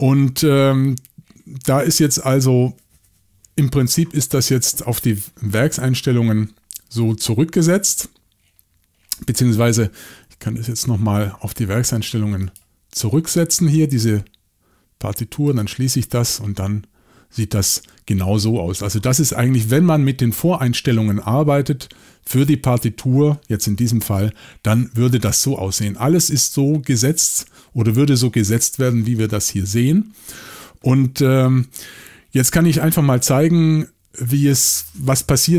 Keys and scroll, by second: 10.7 shift+super+l, 24.0 y, 31.1 typing.